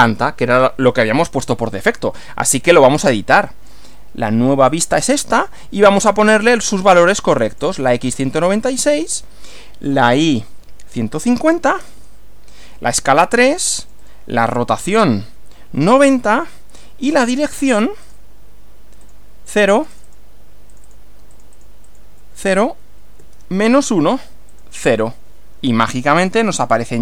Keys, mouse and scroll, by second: 3.2-3.9 drag, 4.7 click, 5.9-6.7 drag, 7.3 click, 8.5 click, 11.1-12.4 typing, 13.5 click, 13.9 click, 15.5-16.4 typing, 17.2-17.9 drag, 18.0 click, 19.0 click, 19.8 click, 20.7 click, 21.3 click, 23.0-23.8 typing, 24.5 click.